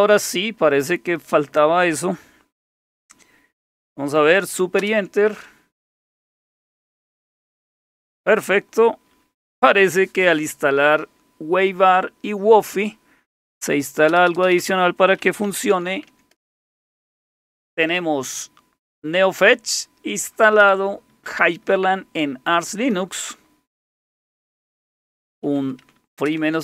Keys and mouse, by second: 4.8 super+Return, 14.1 Return, 14.3 Return, 14.5 Return, 14.6 Return, 15.2-16.3 typing, 16.4 Return, 25.1-26.6 typing.